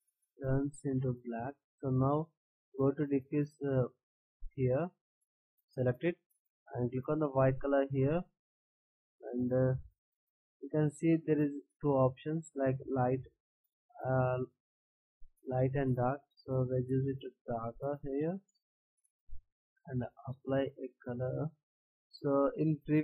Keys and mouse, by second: 2.6-4.5 middle drag, 4.5-5.0 drag, 8.0-13.3 drag.